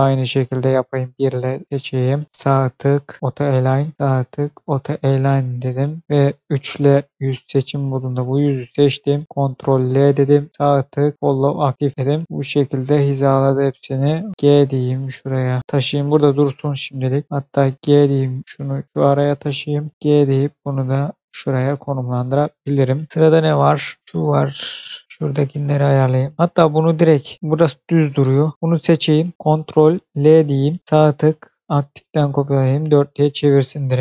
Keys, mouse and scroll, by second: 0.9 1, 1.4 click, 2.2 right click, 3.2 click, 3.9 right click, 4.5 click, 6.9 3, 7.0 click, 7.5 click, 9.3 ctrl+l, 10.4 right click, 11.2 click, 11.9-12.2 scroll down 1, 12.7-13.8 scroll up 1, 14.3 r, 14.3 g, 15.6 click, 15.6-16.7 scroll down 1, 17.2 click, 17.8 g, 18.8 click, 19.9 g, 21.1 click, 21.9-22.6 scroll down 1, 22.6 shift+middle click, 23.1 scroll up 1, 23.3 shift+middle click, 23.6-23.9 shift+scroll up 2, 25.8 click, 27.5-28.5 scroll up 1, 28.5-29.1 scroll down 1, 30.0 ctrl+l, 30.8 right click, 31.5 click, 32.2 scroll down 1, 33.2 scroll up 1, 33.9-34.0 scroll down 1.